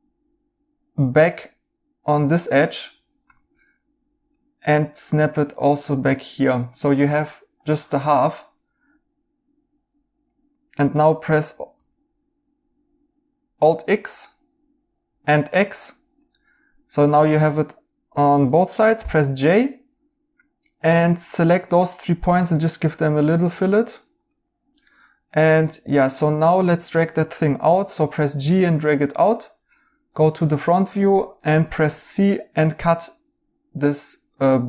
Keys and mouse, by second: 3.3 ctrl+z, 6.0 right click, 11.7 alt+x, 18.9 j, 22.2 b, 24.8 right click, 27.6 g, 30.6 right click, 31.5 c.